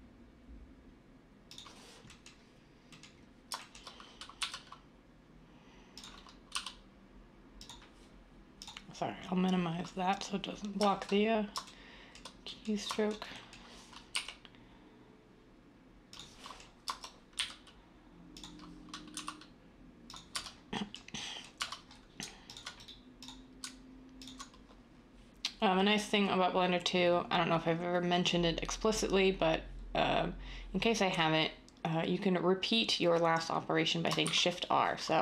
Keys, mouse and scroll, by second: 4.4 e, 6.5 s, 14.1 i, 17.3 e, 19.1 s, 20.3 Tab, 21.6 Tab, 34.2 r.